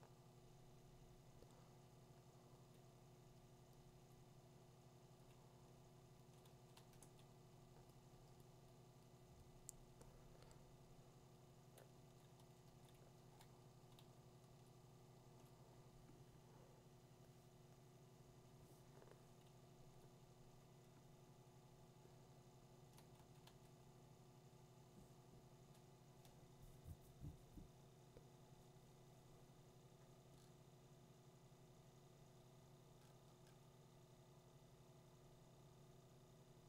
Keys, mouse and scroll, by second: 3.9 click, 5.8 click, 6.4 click, 12.0 [, 12.4 [, 12.6 [, 13.2 [, 22.9 click, 23.5 2, 30.3 middle click, 31.7 middle click, 31.9 middle click, 32.3 middle click, 32.4 middle click, 32.6 middle click, 32.7 middle click, 33.0 middle click, 33.5 middle click.